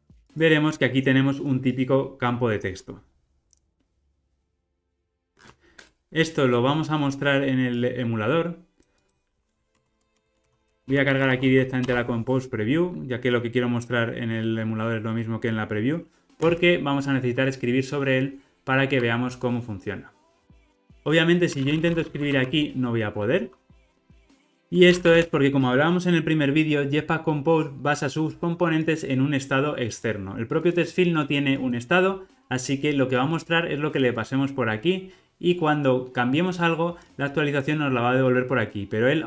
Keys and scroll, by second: 0.2 super+-, 9.7 Tab, 11.8 Return, 16.4 ctrl+r.